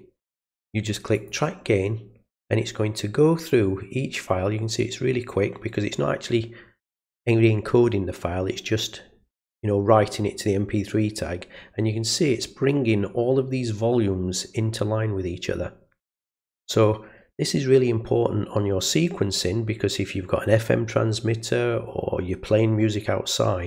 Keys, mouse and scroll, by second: 1.1 click.